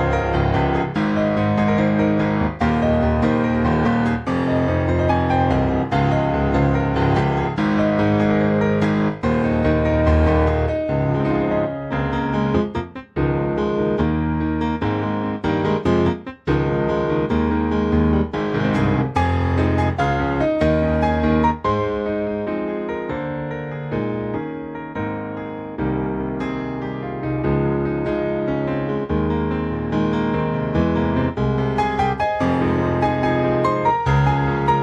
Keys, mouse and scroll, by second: 0.7 ctrl+v, 2.0 click, 3.3 ctrl+c, 3.7 ctrl+c, 4.4 click, 5.2 ctrl+v, 5.5 ctrl+v, 6.6 click, 7.3 click, 9.3 ctrl+c, 10.0 ctrl+c, 11.0 click, 12.3 click, 13.9 ctrl+v, 14.3 click, 24.4 click.